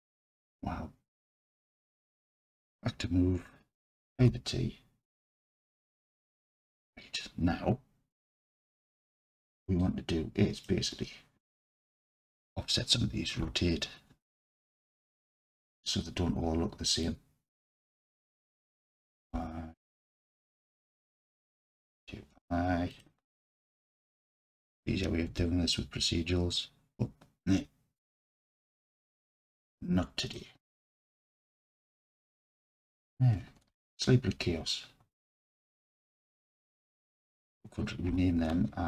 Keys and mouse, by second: 2.0-4.2 drag, 4.2 t, 8.7 alt+z, 9.8 click, 11.6-12.3 drag, 13.5 r, 14.6 y, 15.6 click, 17.1-17.8 drag, 18.7 r, 19.4 y, 20.2-21.4 drag, 22.0 r, 22.3 y, 23.0 click, 23.6-24.4 drag, 25.3 r, 28.6 click, 29.8-30.4 drag, 31.2 r, 31.5 y, 32.8 click, 33.7 alt+z, 34.3 Tab, 35.2-36.7 alt+drag, 38.1 F2.